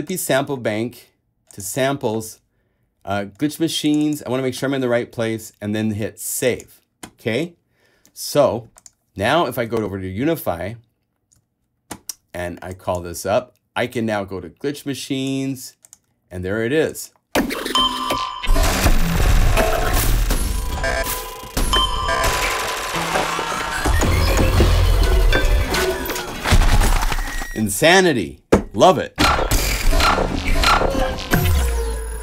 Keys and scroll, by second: 9.9 alt+super+Tab, 10.7 super+Tab.